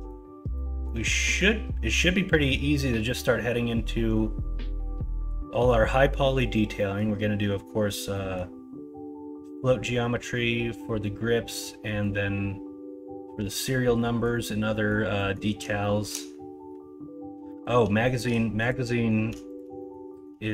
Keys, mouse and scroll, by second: 0.5 middle drag, 1.2 middle drag, 2.1 middle click, 6.7 middle drag, 8.1 middle click, 11.8 middle click, 14.0 middle drag, 14.7 middle drag, 15.1 middle click, 15.8 shift+middle click, 17.4 middle drag, 17.9 shift+middle drag, 18.9 middle drag, 19.7 middle click, 20.1 middle click.